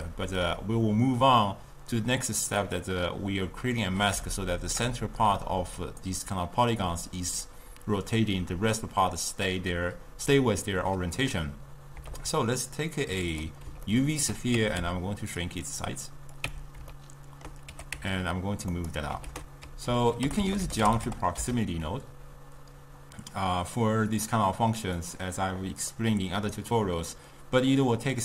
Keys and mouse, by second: 0.1-3.1 middle drag, 4.4-7.5 shift+middle drag, 12.2 shift+a, 13.9-14.6 ctrl+middle drag, 14.6 Tab, 14.8 s, 16.5 Tab, 17.0 ctrl+middle click, 17.8 g, 19.3 ctrl+a, 26.0-28.2 middle drag.